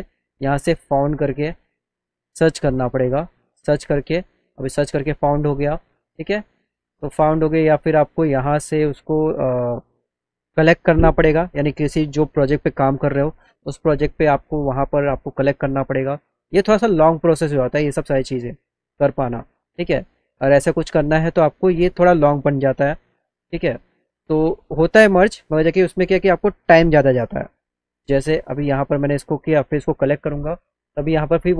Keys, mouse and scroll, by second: 0.0 click, 0.4 click, 0.7 right click, 1.5 click, 3.6 click, 6.4 click, 14.3 click, 14.9 click, 22.7 click, 24.6 click, 25.9 click, 26.9 click, 27.1 click, 28.2 click, 29.7 click.